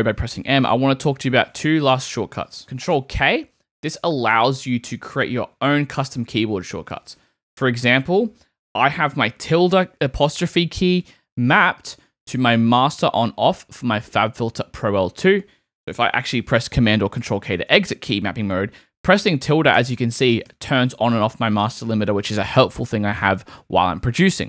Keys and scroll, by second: 2.9 super+k, 17.3 super+k, 19.2 `.